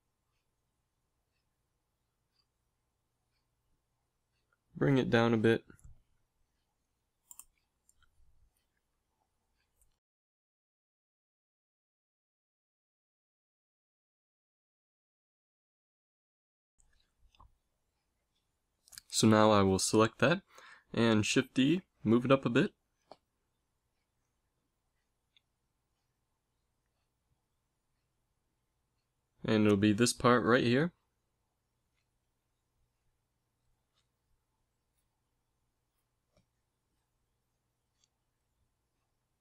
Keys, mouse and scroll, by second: 1.8 a, 4.1 b, 4.5 g, 6.4 middle click, 7.3 g, 9.1 a, 9.6 ctrl+s, 11.4 KP_1, 12.8 t, 13.1 t, 13.3 n, 20.4 l, 21.2 shift+d, 36.0 g.